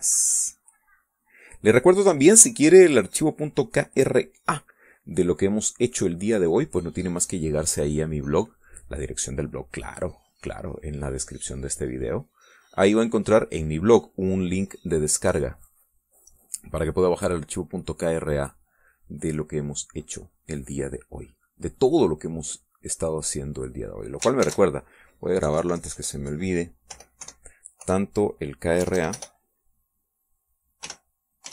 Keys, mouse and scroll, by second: 5.0 middle click, 7.0 click, 7.6 middle click, 8.8-19.5 drag, 19.6 middle click, 20.3-24.8 drag, 25.4 ctrl+shift+s, 26.4 Right, 26.5 Left, 28.2 KP_4, 29.8 BackSpace.